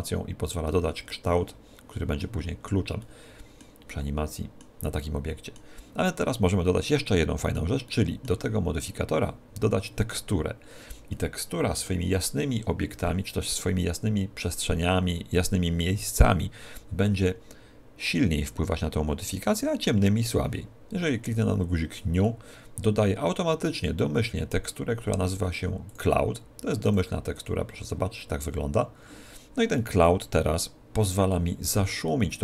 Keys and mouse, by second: 3.0-6.8 middle drag, 7.1-9.7 middle drag, 22.2 click, 25.9-28.8 drag, 29.8-32.4 middle drag.